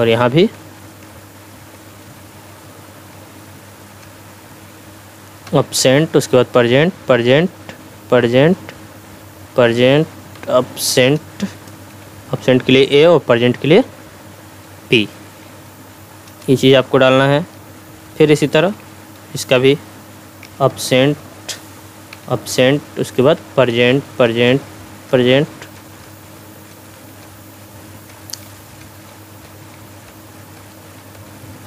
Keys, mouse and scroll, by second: 0.2 p, 0.5 Tab, 1.4 p, 1.7 Tab, 2.0 p, 2.5 Tab, 3.1 p, 4.0 Tab, 5.5-8.7 typing, 5.8 Tab, 6.5 Tab, 7.3 Tab, 8.3 Tab, 9.4 Tab, 10.3 s, 11.9 a, 12.4 Tab, 14.5 p, 15.1 Tab, 15.4 p, 16.3 Return, 20.4 a, 20.7 Tab, 22.1 a, 22.3 Tab, 23.3 p, 23.7 Tab, 23.9 p, 24.3 Tab, 24.5 p, 25.1 Tab, 25.3 p, 26.1 Tab, 26.4 p, 26.7 Tab, 27.3 Tab, 27.8 p, 28.1 Tab, 28.5 p, 28.8 Tab, 29.1 p, 29.4 Tab, 29.7 p, 30.1 Tab, 30.9-31.6 typing, 31.1 Tab.